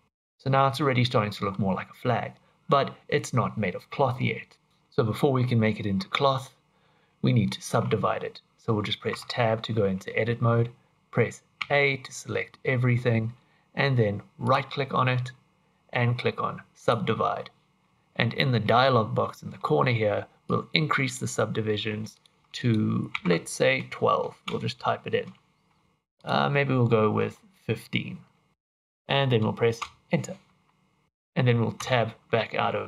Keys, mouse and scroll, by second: 0.0 middle click, 0.6-1.0 scroll down 4, 1.0 scroll up 1, 1.0 middle click, 9.1 Tab, 11.6 a, 14.4 right click, 20.4 click, 22.1 click, 22.5 click, 26.1 click, 29.8 Return, 31.8 Tab, 32.4 middle click.